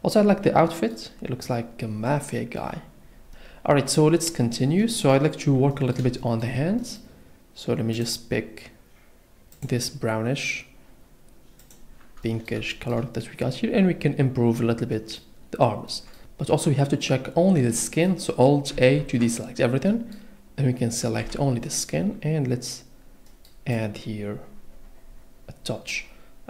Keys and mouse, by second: 6.2 shift+middle click, 6.8 middle click, 11.6 click, 19.0 alt+a, 21.2 l, 23.8 click.